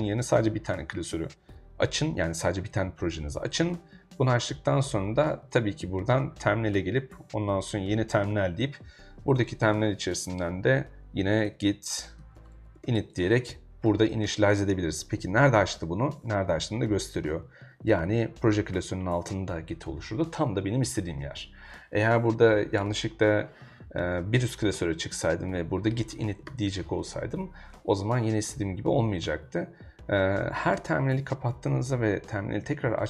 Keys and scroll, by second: 11.1-13.3 typing, 21.8-22.9 typing, 25.3-27.0 typing.